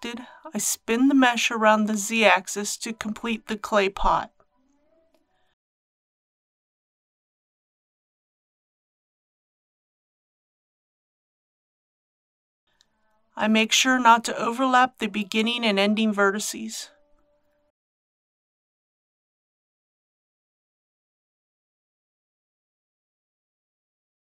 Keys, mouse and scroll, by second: 0.5-15.5 drag, 15.5 scroll up 1, 16.6 shift+middle click, 19.0 click, 21.3 2.